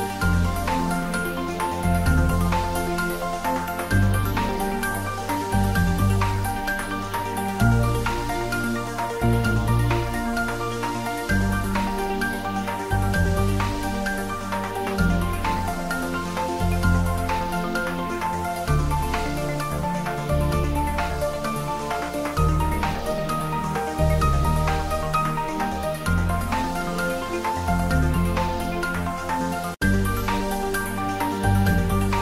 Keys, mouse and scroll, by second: 0.0 ctrl+z, 0.4 g, 1.5 click, 1.8 e, 2.7 click, 2.8 Tab, 2.9-5.0 middle drag, 5.0 click, 5.3 middle click, 5.7 Tab, 6.0 click, 6.6 g, 7.8 click, 13.2 click, 13.3 e, 14.0 click, 14.1 Tab, 14.3-15.9 middle drag, 16.1 Tab, 16.4 middle click, 16.7 click, 17.1 shift+click, 17.6 middle click, 18.2 shift+d, 19.5 x, 20.1 click, 20.5 p, 20.8 click, 21.2 middle click, 21.4 Tab, 21.5-23.0 middle drag, 23.0 Tab, 23.4 ctrl+middle click, 24.2 click, 25.3 Tab, 25.8 right click, 26.8 click, 28.2 ctrl+a, 28.7 click, 29.2 Tab, 30.7 click.